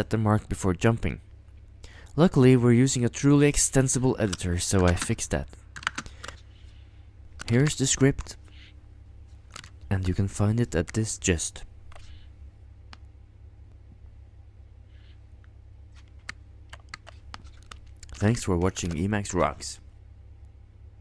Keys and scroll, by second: 4.8 ctrl+u, 4.9 ctrl+space, 5.7 ctrl+u, 5.8 ctrl+space, 7.4 ctrl+x, 8.1 Return, 9.5 ctrl+x, 9.6 ctrl+i, 10.3 Return, 18.1 ctrl+x, 18.3-19.6 typing.